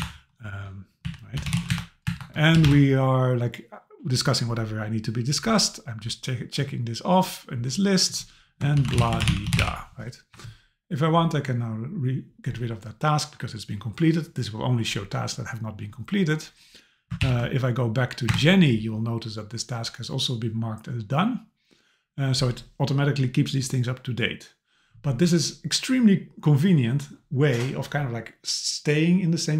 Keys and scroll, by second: 1.7 Return, 17.2 super+k, 18.3 Return.